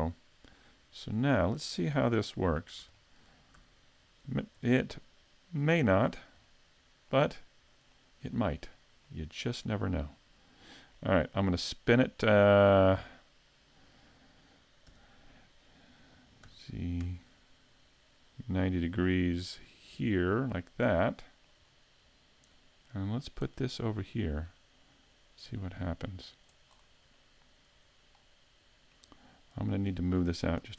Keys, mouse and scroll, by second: 0.1 scroll down 1, 0.5 right click, 1.2 right click, 2.1 super+s, 2.6-3.0 scroll down 1, 3.0 shift+middle click, 3.6 a, 5.6 shift+click, 6.0-6.3 scroll down 3, 6.5 middle click, 7.8 right click, 8.3 shift+middle click, 9.1 middle click, 10.9 middle click, 14.9 r, 21.1 middle click, 21.6-22.1 scroll up 4, 22.5 click, 26.7-27.1 scroll down 4, 27.2 middle click, 29.7 right click, 30.6 s.